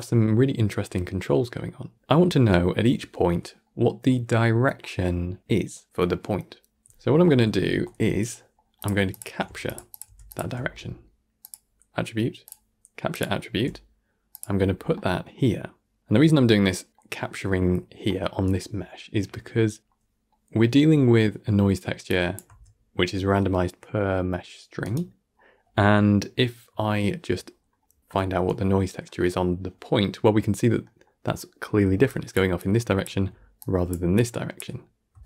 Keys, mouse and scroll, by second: 2.0 middle click, 2.5-3.5 scroll up 4, 3.5-6.0 middle drag, 7.7 middle click, 8.7 click, 9.0 shift+click, 9.3 g, 9.8 click, 9.9 g, 10.5 shift+a, 13.4 g, 14.8-16.2 middle drag, 16.2-16.5 scroll down 7, 16.5 middle click, 17.0-18.0 scroll up 2, 18.0-22.0 middle drag, 22.0 click, 22.3 g, 27.4 scroll down 4, 27.7-31.8 middle drag, 31.8-35.2 typing, 31.9 click, 32.5 click, 33.5 click, 34.0 click, 35.1 right click.